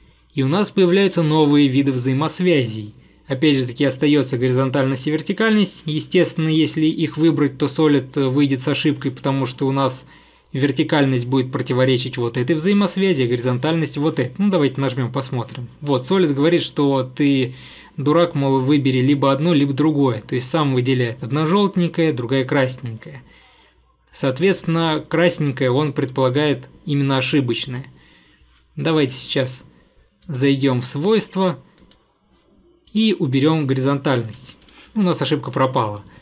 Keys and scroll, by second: 27.7 Escape, 33.0 Delete.